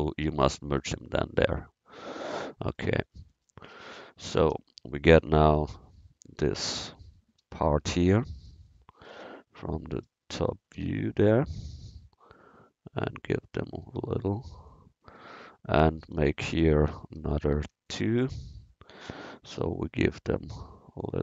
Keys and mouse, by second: 4.4 a, 5.6 c, 6.5 click, 7.5 KP_1, 7.7 KP_0, 8.1 KP_1, 9.0 KP_7, 10.1 KP_1, 17.2 ctrl+r, 19.6 a, 20.6 c.